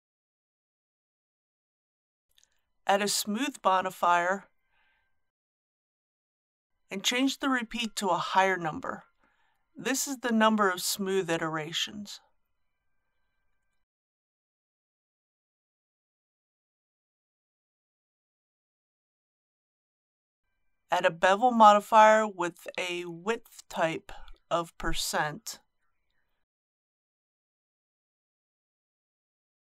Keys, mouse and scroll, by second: 2.0 click, 12.2 KP_4, 19.2 click.